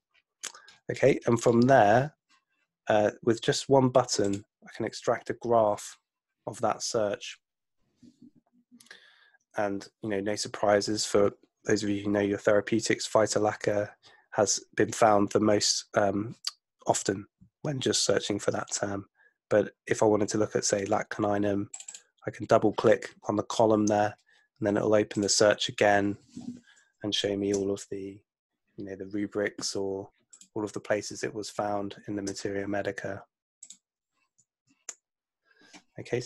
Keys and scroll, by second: 9.0 super+F2.